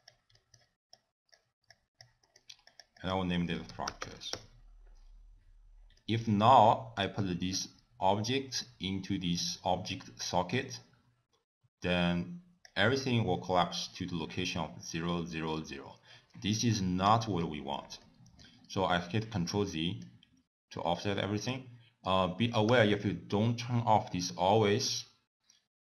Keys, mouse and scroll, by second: 0.4 middle click, 1.1 click, 1.8 click, 2.3 middle click, 2.8 click, 3.1 click, 6.1 middle click, 6.7 click, 7.7 click, 13.5 middle click, 14.0 scroll up 2, 17.2 ctrl+z, 18.1 middle click, 18.1 scroll up 1, 18.7 scroll down 3, 19.6 middle click, 21.5 click, 22.8 t.